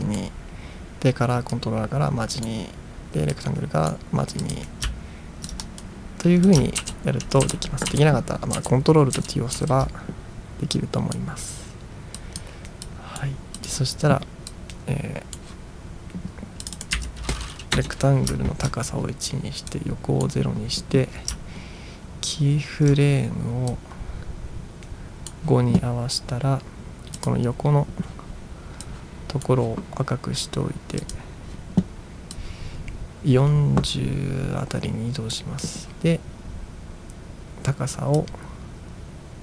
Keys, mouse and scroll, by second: 1.6-2.5 drag, 3.4-3.9 drag, 4.5 click, 5.5 ctrl+click, 6.5 click, 6.8 ctrl+t, 7.5 ctrl+t, 7.9 ctrl+t, 8.6 ctrl+t, 9.2 ctrl+t, 9.6 ctrl+t, 10.8-11.2 drag, 12.2 drag, 13.0-13.3 drag, 13.6 click, 14.6-15.4 drag, 16.8 click, 17.0 1, 17.8 Return, 18.4-18.8 ctrl+scroll down 2, 19.7-20.3 drag, 21.6 ctrl+scroll up 4, 22.3-22.9 ctrl+scroll up 2, 23.8-25.3 drag, 27.3 click, 29.0-29.6 drag, 31.0 click, 32.6-35.4 drag, 38.2-39.4 drag.